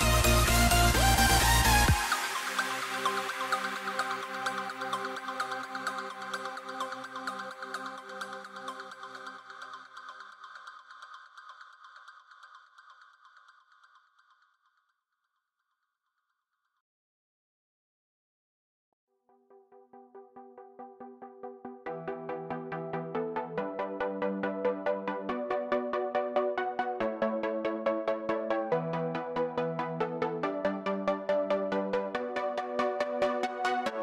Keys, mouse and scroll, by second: 6.2-15.6 middle drag, 15.6 click.